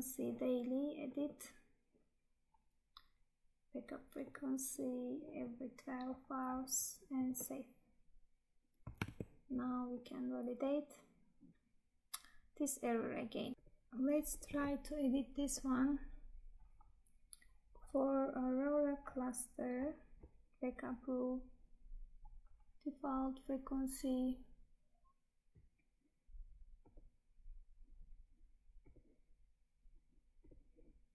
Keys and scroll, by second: 9.1 Tab.